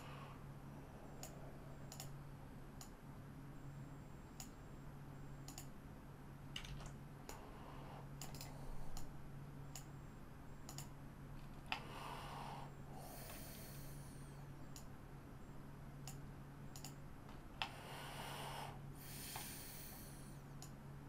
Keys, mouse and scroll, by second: 2.0 typing, 2.8-5.6 drag, 6.7 ctrl+z, 7.2-8.5 drag, 9.0-10.8 drag, 11.7-13.3 middle drag, 14.7-16.9 drag, 17.6-19.3 middle drag, 20.6-21.0 drag.